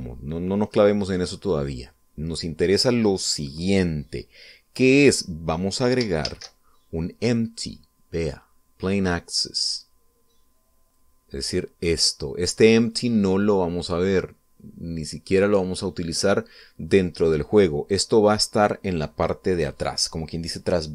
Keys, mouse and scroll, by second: 1.2-1.6 scroll up 1, 1.7 scroll down 1, 2.3-3.9 middle drag, 7.2 shift+a, 10.6 click, 11.8-16.5 drag.